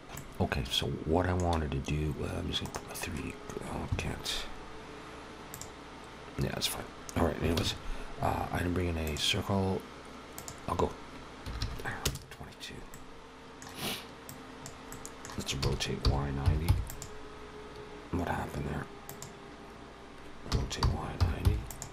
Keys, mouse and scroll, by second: 0.0 alt+a, 0.0 ctrl+s, 0.0 middle click, 0.0-0.6 scroll up 1, 2.5 right click, 5.3 click, 7.4 shift+a, 10.2 click, 11.4 2, 12.7 middle click, 14.1 click, 14.7 middle click, 15.4 e, 15.9 y, 16.3 9, 16.4 0, 16.6 click, 19.0 click, 20.3 r.